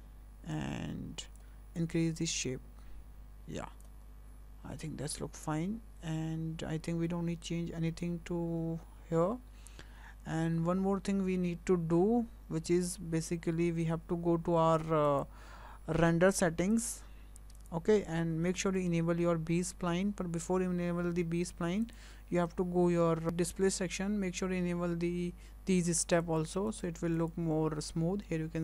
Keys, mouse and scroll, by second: 1.8 click, 4.5-4.8 scroll up 2, 5.7-8.3 scroll up 2, 8.3-9.2 scroll up 3, 9.2-10.1 scroll up 2, 10.4-11.1 scroll up 2, 11.1-14.1 scroll up 1, 15.1 click, 16.7 click, 17.6 click, 21.8 click, 23.2-23.8 scroll down 10, 23.8-26.1 scroll down 3, 26.2 click, 26.7 click, 27.2 click.